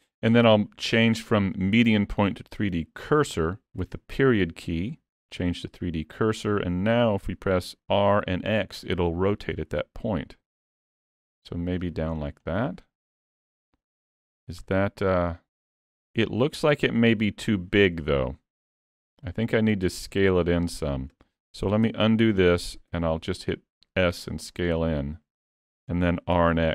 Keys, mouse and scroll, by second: 8.0 r, 12.2-12.5 scroll down 3, 12.5 middle click, 14.3 scroll up 3, 14.7 middle click, 15.8 middle click, 18.1 middle click, 20.2 middle click, 21.9 ctrl+z, 22.9 s, 26.1 r.